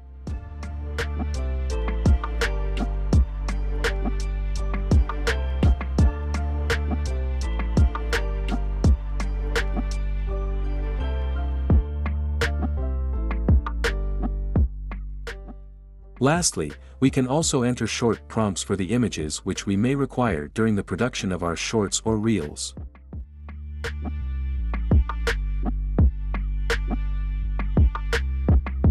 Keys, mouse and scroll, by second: 2.0 click, 4.5 click, 15.8-18.1 drag, 18.6-19.5 drag.